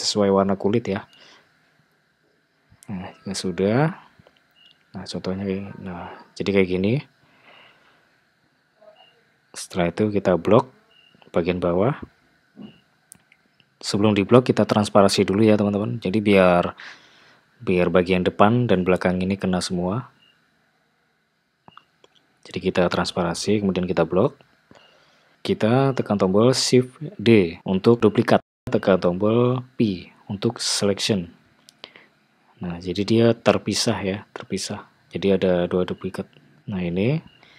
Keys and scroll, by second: 8.8 Tab, 11.8 alt+z, 18.3 ', 26.3 shift+d, 29.3 p, 32.0 Tab.